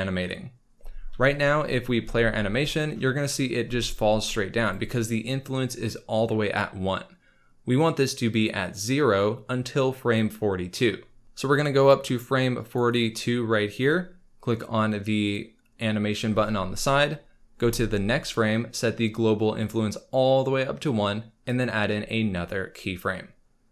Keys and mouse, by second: 2.0 space, 3.6 space, 4.6 click, 7.9 click, 11.2 ctrl+s, 11.5 click, 12.9 click, 13.0 click, 15.2 click, 17.6 Right, 19.6 click, 21.4 click.